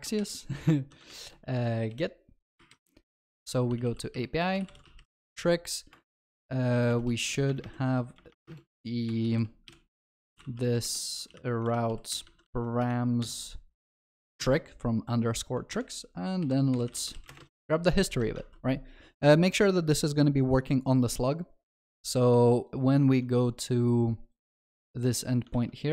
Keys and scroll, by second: 11.7 Return, 17.7 ctrl+s, 18.1 ctrl+alt+shift+l, 18.5 ctrl+s, 25.6 ctrl+c.